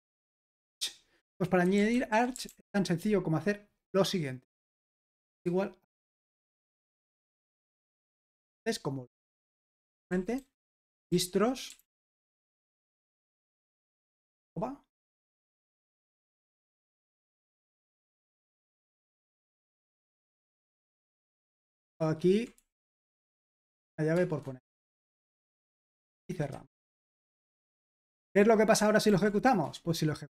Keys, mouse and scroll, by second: 1.5-3.1 typing, 5.4 typing, 7.3-8.1 typing, 9.9-13.4 typing, 15.0-20.1 typing, 22.0 ctrl+w, 22.6-27.5 typing, 26.5 Escape, 27.9 super+h, 29.1 ctrl+p, 29.7 Return.